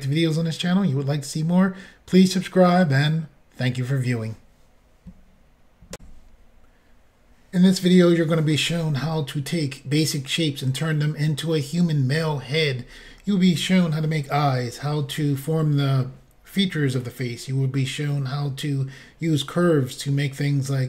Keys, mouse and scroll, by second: 6.0 Insert.